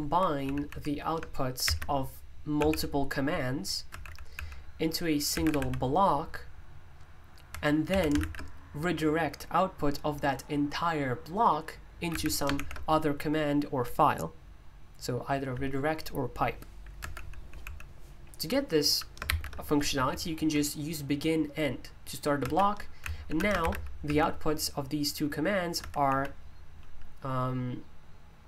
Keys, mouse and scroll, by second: 0.0 Escape, 0.4-2.6 typing, 3.9-6.0 typing, 7.2-8.7 typing, 12.1 shift+v, 17.0 Escape, 17.1-17.6 typing, 19.0-20.4 typing, 22.4-24.6 typing, 25.7 typing.